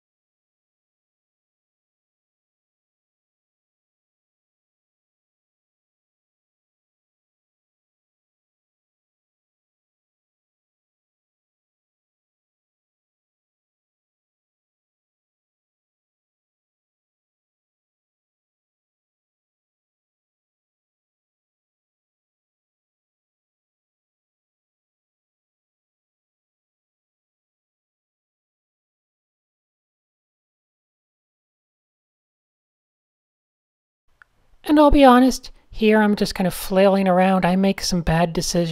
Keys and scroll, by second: 1.8 d, 3.0 super+z, 4.1 Tab, 5.3 Tab, 5.4-12.1 typing, 13.8-15.0 typing, 17.4 d, 18.2 a, 18.7 super+h, 19.4 typing, 23.5 super+z, 23.6 super+z, 28.5 super+z, 28.5 super+z, 29.5 d, 30.5 alt+shift+super+g, 31.0 alt+super+g, 32.5 shift+super+a, 33.0 shift+super+a, 33.8 super+s, 35.8-38.7 typing.